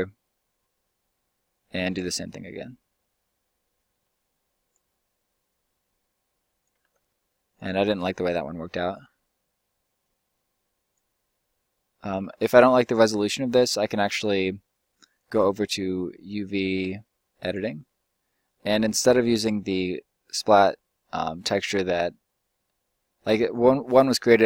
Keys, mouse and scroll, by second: 6.8 ctrl+z, 12.2 ctrl+z, 12.5 ctrl+z, 14.0-15.0 middle drag, 17.5-18.2 middle drag, 20.4-21.5 drag, 21.5-24.4 middle drag.